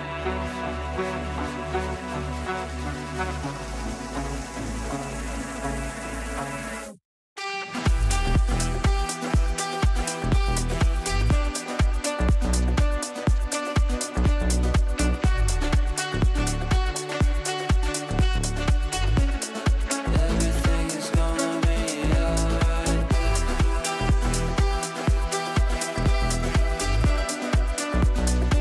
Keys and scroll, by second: 13.0 g.